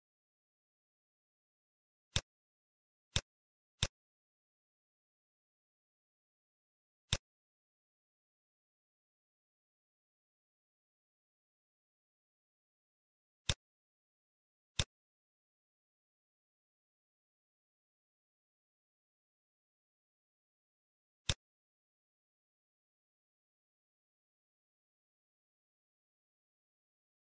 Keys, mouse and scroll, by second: 3.3 click, 7.1 click, 8.0-8.5 scroll down 4, 8.5 middle click, 9.2-9.7 scroll up 6, 10.6 middle click, 11.4 scroll up 2, 12.1 middle click, 12.3 scroll up 1, 12.5 middle click, 13.4 click, 18.2-18.5 scroll down 6, 18.9-19.4 scroll down 11, 19.4 middle click, 19.6-20.3 scroll up 8, 20.3 middle click, 21.2 click, 22.1 x, 22.9 scroll down 6, 23.2 middle click, 23.8-24.9 scroll up 9, 24.9 scroll down 1, 25.7 shift+middle click, 26.6-27.2 scroll down 1.